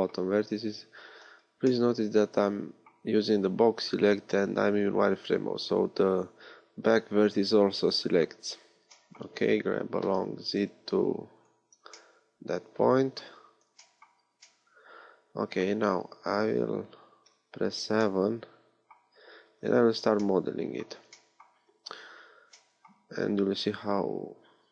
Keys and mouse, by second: 8.0 KP_1, 10.1 g, 17.2 KP_7, 23.1 a.